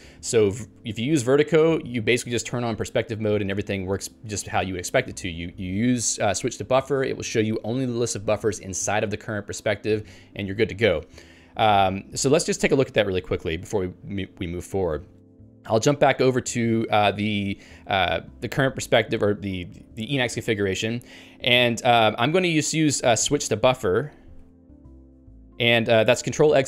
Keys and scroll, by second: 15.2 Down.